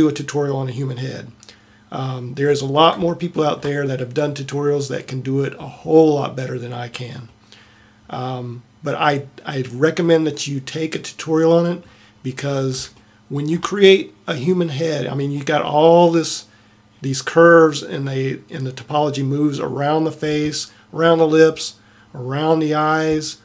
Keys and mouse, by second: 5.8-7.3 middle drag, 9.3 middle click.